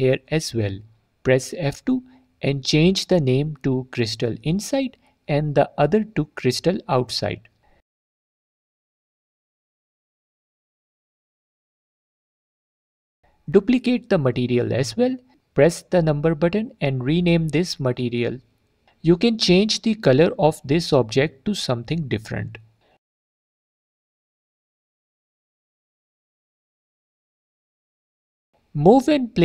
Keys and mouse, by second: 0.8 F2, 6.9 click, 7.7 F2, 12.8 click, 14.3-16.4 drag, 16.8-19.6 drag, 20.7-21.4 drag, 26.9 alt+click.